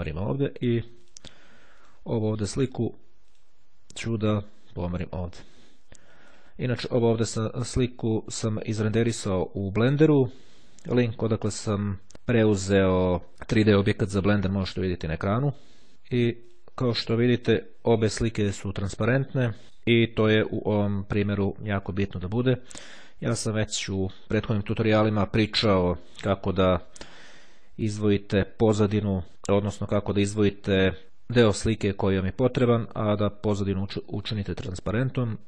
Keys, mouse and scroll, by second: 0.9 click, 1.9 click, 3.4 click, 4.4-7.0 drag, 15.9 click, 16.6-17.7 drag.